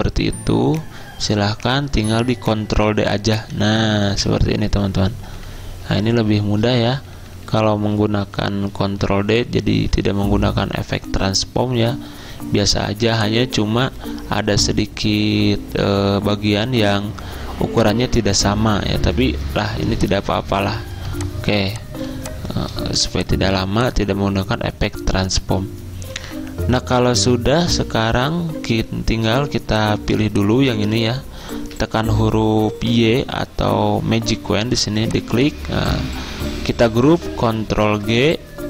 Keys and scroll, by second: 3.6 ctrl+d, 3.8 ctrl+d, 3.9 ctrl+d, 13.0 z, 22.9 v, 29.7 z, 31.8 y, 37.9 ctrl+g.